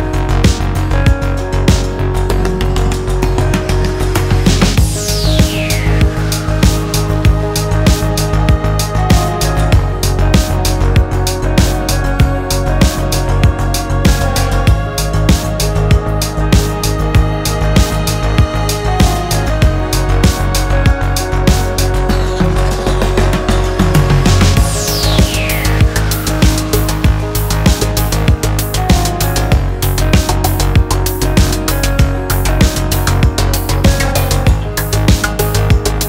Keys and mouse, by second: 0.3 s, 2.4-3.9 drag, 4.7 s, 13.2 shift+click, 13.5 click, 15.2-16.3 drag, 16.7 s, 18.5 Tab, 18.8-20.3 drag, 20.6 shift+click, 21.1-21.4 shift+drag, 21.9 drag, 22.4 ctrl+click, 23.0 Tab, 23.6 shift+click, 24.5-27.5 drag, 27.9 shift+click, 28.2-31.1 drag, 31.3 shift+middle click, 31.7 middle click, 32.1 Tab, 32.3 click, 32.7 shift+click, 33.1 Tab, 34.2 shift+click, 35.3 Tab, 35.9 ctrl+a.